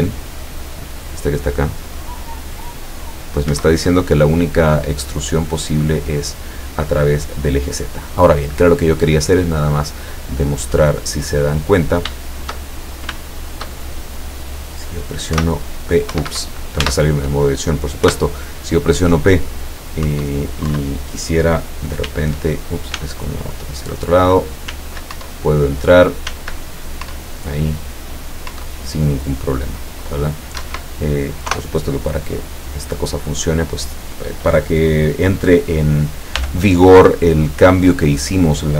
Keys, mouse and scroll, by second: 3.6 Escape, 5.3-5.6 scroll down 2, 6.2-8.3 drag, 10.5-11.7 drag, 12.3-13.3 shift+drag, 13.4 shift+click, 14.2 scroll up 2, 15.4 p, 16.1 Escape, 16.8 Tab, 18.1 p, 20.2 Up, 20.8 Down, 22.1 w, 23.1 s, 25.2 Up, 26.4 s, 28.6 Up, 30.7 Escape, 31.5 KP_0, 33.7 right click, 36.4 g, 38.2 click.